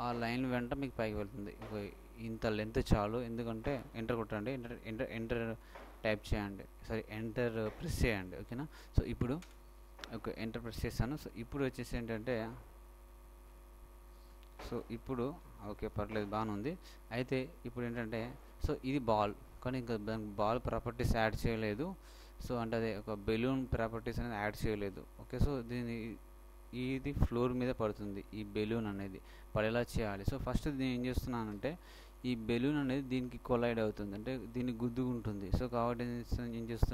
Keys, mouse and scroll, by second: 12.2-14.8 middle drag, 15.6 ctrl+middle click, 16.8 ctrl+middle click, 31.9-33.7 shift+middle drag.